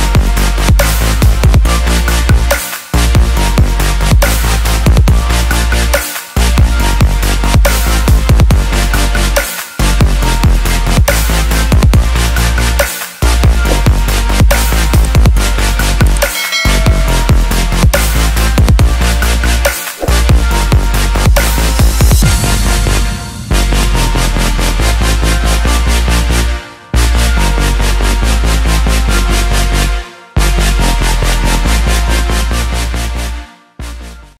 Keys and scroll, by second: 1.2 ctrl+s, 4.0 ctrl+d, 6.4 ctrl+s.